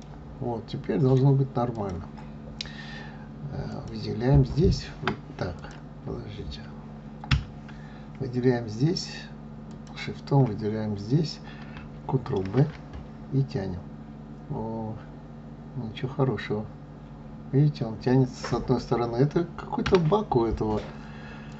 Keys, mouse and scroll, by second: 1.7 click, 2.5-3.6 scroll up 1, 3.6 click, 4.5 Tab, 5.5 click, 7.2 Tab, 9.6 shift+click, 12.3 ctrl+b, 21.4 click.